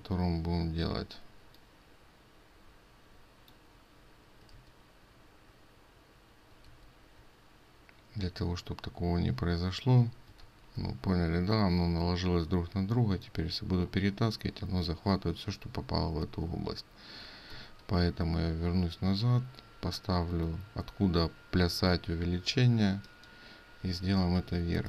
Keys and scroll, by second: 4.5 ctrl+z, 6.7 ctrl+z, 10.5 ctrl+shift+z, 16.2 ctrl+z, 17.6 ctrl+z.